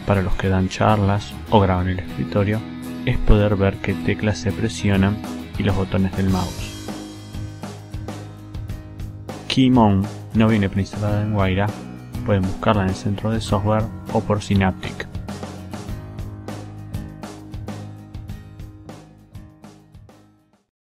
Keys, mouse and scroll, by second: 2.0 ctrl+space, 3.4 g, 3.7 i, 5.7 alt+click, 9.2 alt+click, 9.3 alt+right click, 10.7 click, 13.5-14.5 drag, 15.3 click, 16.9 click, 18.1 click.